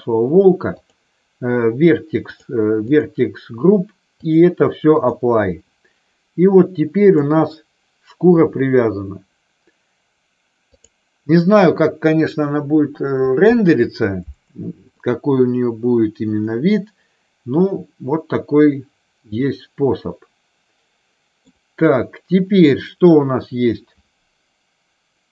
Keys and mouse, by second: 4.2-5.2 drag, 6.9 click, 10.7 click, 14.9-21.4 middle drag.